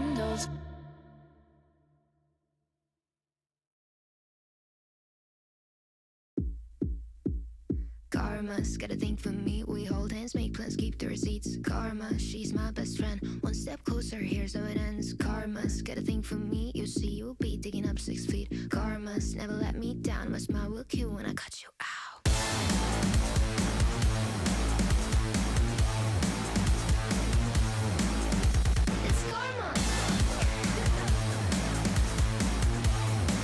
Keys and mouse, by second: 0.3 Tab, 0.9 click, 1.2 shift+click, 2.0 shift+drag, 3.0 KP_7, 4.3 shift+drag, 4.7 click, 5.0 shift+drag, 6.6 g, 8.1 y, 8.8-9.7 middle drag, 10.2 KP_1, 11.5 shift+click, 12.2 ctrl+shift+s, 20.5 click, 21.0 g, 22.8 x, 22.9 x, 22.9 x, 23.2 click, 24.5 KP_7, 25.1 shift+a, 26.9 s, 28.0 s, 28.3 g, 29.9 y, 30.4 KP_1, 31.8 g, 33.0 z, 33.2 z, 33.2 s.